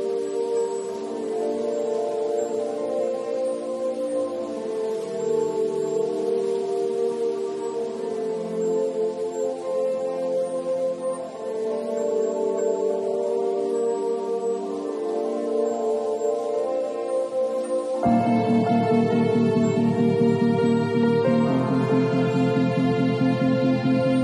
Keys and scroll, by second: 5.6 [, 9.1 [, 17.9 v.